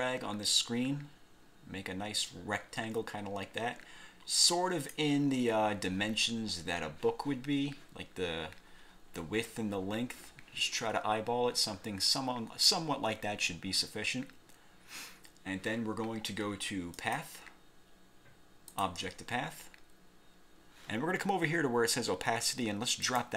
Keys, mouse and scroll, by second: 17.1 click, 18.8 click, 23.2 click.